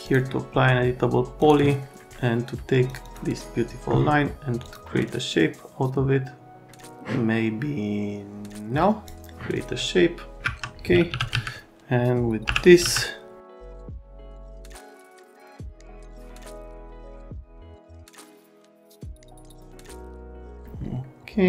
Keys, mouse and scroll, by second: 0.0 click, 1.4 click, 2.9 click, 3.0 click, 4.6 click, 10.4 alt+q, 10.8-12.8 typing, 13.5 right click, 14.0 click, 14.5 click, 14.8 click, 16.8 click, 16.9 right click, 17.1 right click, 17.2 click, 18.2 click, 18.9 Delete, 19.1 click, 19.7 click, 19.9 click, 20.0 Delete, 20.2 click, 20.4 Delete.